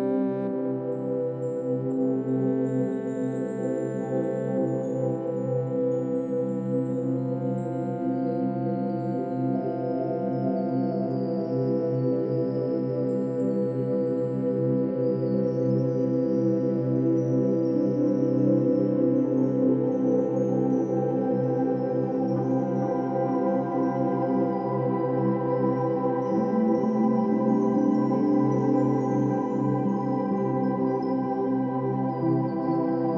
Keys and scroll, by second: 1.1 BackSpace, 2.2 ctrl+z, 10.2 ctrl+z, 14.2 Delete, 21.8 Delete.